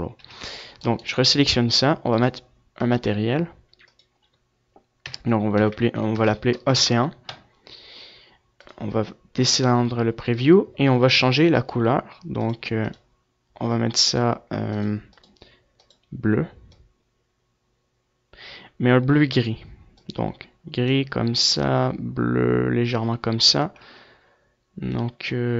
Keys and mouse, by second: 0.1-1.3 drag, 2.4-10.7 drag, 10.7 z, 11.7-19.3 drag.